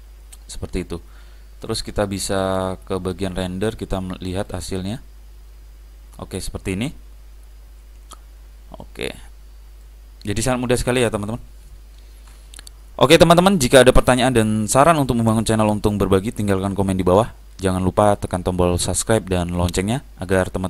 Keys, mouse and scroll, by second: 3.5 click, 7.9 Escape, 9.0-10.7 middle drag, 11.1-12.3 middle drag.